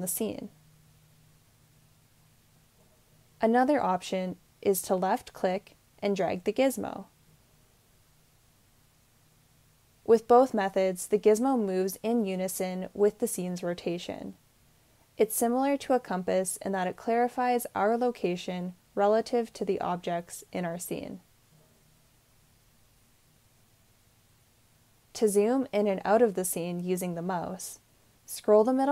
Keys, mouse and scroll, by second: 27.6-28.9 middle drag.